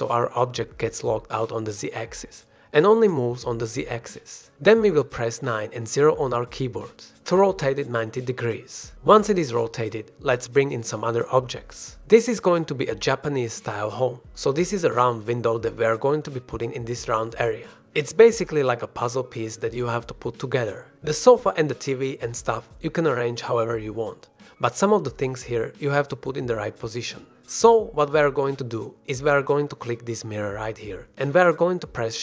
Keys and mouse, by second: 4.0 click, 4.5 r, 4.9 z, 6.5 KP_9, 6.9 KP_0, 9.7 click, 10.2-10.6 drag, 10.8 shift+drag, 11.5 ctrl+s, 12.1-12.6 drag, 12.7 ctrl+s, 14.1 shift+drag, 14.5-14.8 drag, 16.5 click, 17.3 click, 18.1 shift+drag, 18.5 drag, 22.3 shift+click, 22.6 click, 24.4 middle click, 24.8 shift+middle drag, 25.6 shift+middle click, 26.1-26.5 middle drag, 26.6 drag, 26.8 shift+drag, 27.7 click, 27.9-28.3 drag, 28.7 click, 29.5 click, 29.6 g, 30.1-30.5 drag, 30.9-31.2 shift+drag.